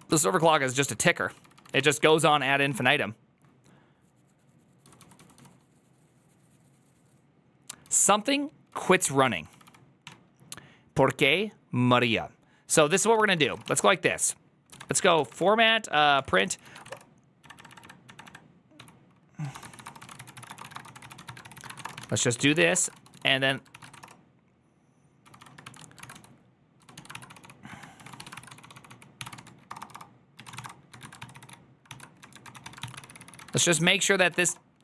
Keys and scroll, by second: 0.0-3.1 typing, 4.5-5.2 typing, 8.4-10.4 typing, 12.8-15.7 typing, 16.0 Tab, 16.3 ctrl+c, 16.3 ctrl+c, 16.6 ctrl+:, 16.7-23.9 typing, 25.0-34.8 typing, 28.2 ctrl+c, 31.0 ctrl+c, 31.2 ctrl+c, 33.4 ctrl+c, 33.8 ctrl+c.